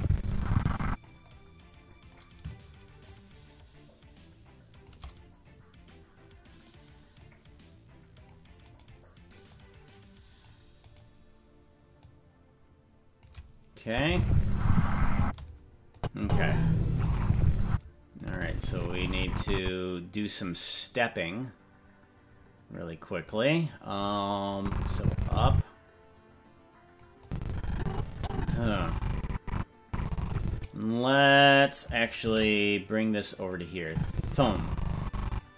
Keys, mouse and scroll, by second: 1.3 scroll down 2, 1.9-3.0 scroll up 1, 3.0-4.9 shift+drag, 7.2-8.3 drag, 8.7 right click, 9.4-10.5 drag, 10.9 right click, 12.0-13.2 drag, 13.9 click, 14.0 space, 15.2 space, 15.9 click, 16.2 space, 17.7 space, 18.2-19.6 drag, 20.2 right click, 24.6-27.0 drag, 27.2-30.7 drag, 31.2 right click, 32.2 shift+d, 33.9-35.4 drag.